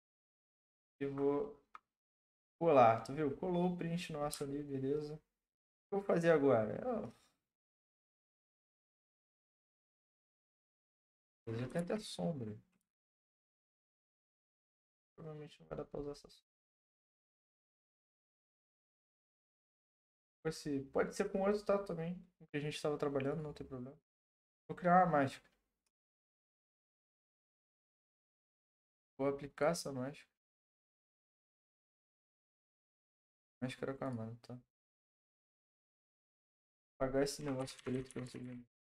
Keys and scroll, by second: 0.2 ctrl+v, 5.0 Print, 11.7 ctrl+d, 37.6-38.4 typing.